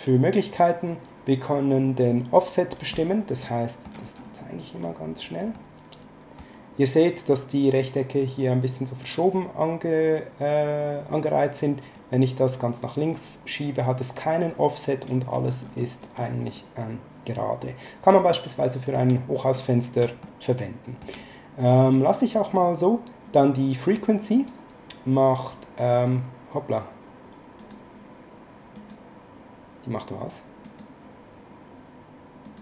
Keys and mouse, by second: 0.6 click, 3.4 middle click, 5.6 middle click, 11.9 click, 18.3 shift+middle click, 20.2 shift+middle click, 24.5 click, 27.6 click, 28.7 click, 30.6 click, 32.4 click.